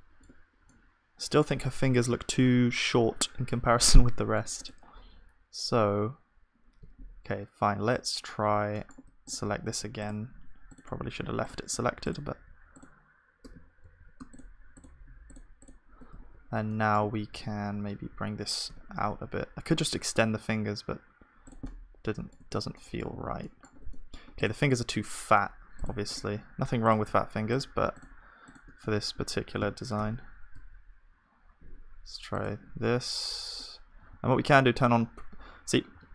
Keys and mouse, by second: 4.0-6.9 middle drag, 6.9 z, 8.7-10.3 middle drag, 10.3-17.9 drag, 13.8 ctrl+z, 16.1 z, 17.2 g, 17.9-20.9 middle drag, 22.5 Tab, 22.5-23.7 middle drag, 23.1 ctrl+s, 23.7 Tab, 25.8-30.5 drag, 25.8 middle click, 28.8-32.3 middle drag, 29.6 s, 34.1 ctrl+z, 34.1-35.9 middle drag, 35.9 s.